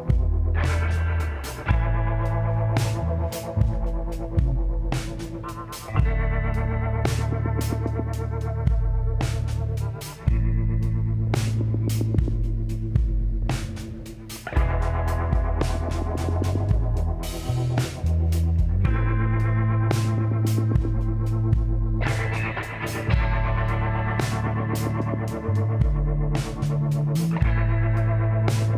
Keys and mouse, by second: 0.5 click, 2.1 k, 6.0 click, 8.7-14.9 drag, 11.1 f, 14.0 f, 14.8 middle click, 15.4-23.7 drag, 19.5 f, 22.6 f, 24.2-28.7 drag, 26.5 f.